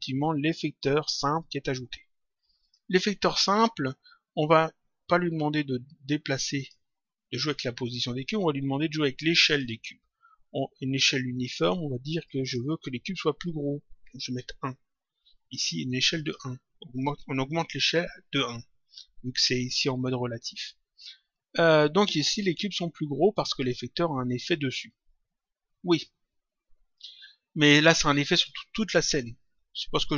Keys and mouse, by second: 2.6 click, 6.5 click, 9.5 click, 11.3 click, 16.1 click, 22.2 click.